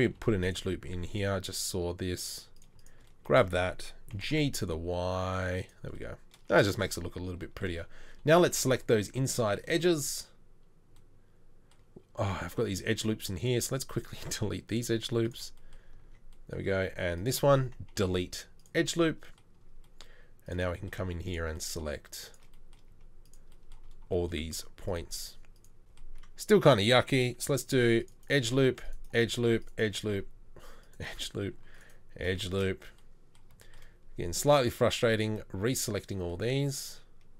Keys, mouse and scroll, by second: 0.2 ctrl+r, 4.2 g, 8.4 2, 18.0 Delete, 27.7 ctrl+r, 28.6 ctrl+r, 29.5 ctrl+r, 30.1 ctrl+r, 31.6 ctrl+r.